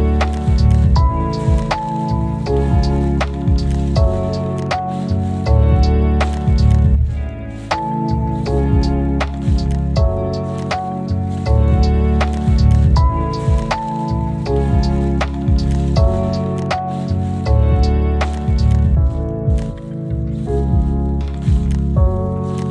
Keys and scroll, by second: 1.1 y, 1.4 space, 1.7 n, 3.0-5.9 typing.